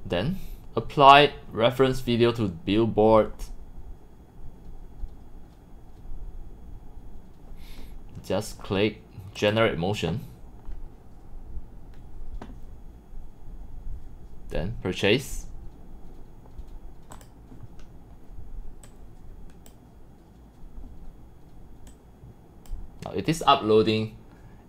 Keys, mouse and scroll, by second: 0.8-1.3 drag, 4.3 click, 9.5 click, 10.2 click, 14.1-14.7 drag, 17.1 click, 18.9 click, 21.9-22.7 drag, 22.8-24.6 drag.